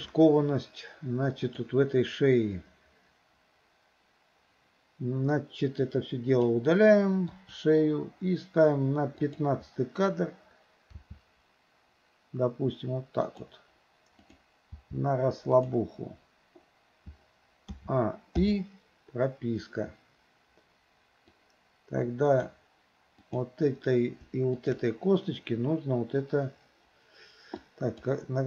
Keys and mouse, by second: 1.6 click, 5.8 click, 5.9-6.5 drag, 7.4 Delete, 9.3 click, 11.0 r, 14.2 click, 14.8 r, 17.8 a, 18.4 i, 21.3 click, 21.5-22.5 drag, 23.2 click, 24.6 shift+click, 27.6-28.0 drag.